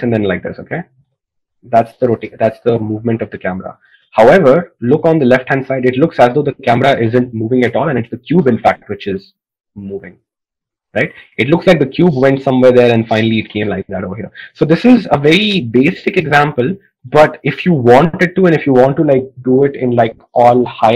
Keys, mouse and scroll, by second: 18.2-20.9 drag.